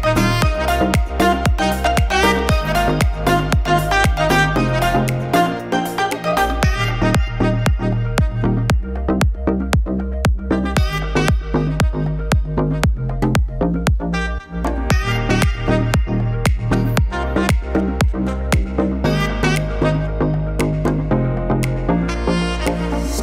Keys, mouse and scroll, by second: 0.0 shift+middle click, 0.2 middle click, 0.6 Tab, 0.8 middle click, 3.1 ctrl+r, 4.7 alt+a, 4.9 Tab, 5.0-5.4 scroll down 5, 5.3 alt+a, 5.4 middle click, 6.6 shift+middle click, 6.9 click, 10.1 click, 10.6 middle click, 11.6 shift+middle click, 11.6 scroll up 2, 14.8 Tab, 14.8 click, 15.1 middle click, 15.8 middle click, 17.8 Tab, 18.0 middle click, 18.6 click, 19.7 click, 20.9 shift+middle click, 21.3 click, 21.6 middle click, 21.8 scroll down 5, 22.0 shift+middle click, 22.4 middle click, 22.8 shift+middle click, 23.0 middle click.